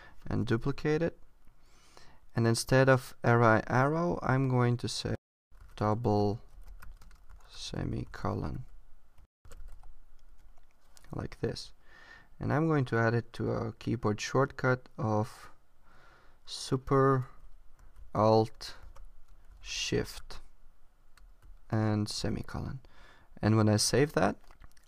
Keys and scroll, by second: 0.4 Return, 0.6 super+v, 5.6 shift+d, 7.1 space, 7.3 shift+s, 23.6 super+s.